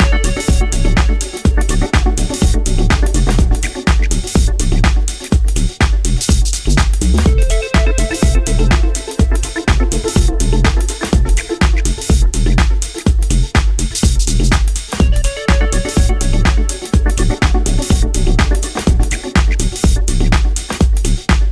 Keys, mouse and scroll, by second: 5.4-7.4 scroll down 5, 7.4 click, 7.4 scroll down 3, 7.5 click, 8.3 scroll down 3, 8.4 scroll up 1, 8.7 middle click, 9.8 shift+middle click, 10.8 KP_1, 11.7-12.3 scroll up 4, 12.3-12.9 scroll down 1, 15.5 click, 17.0 Tab, 17.9-18.9 scroll up 2, 18.4 shift+middle click, 19.8 ctrl+Tab.